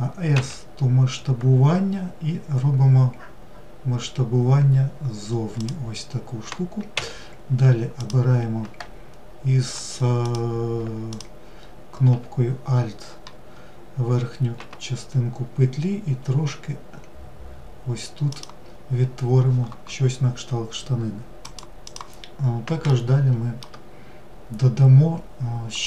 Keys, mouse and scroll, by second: 7.3 click, 9.6 click, 10.4 alt+click, 21.9-25.8 shift+middle drag.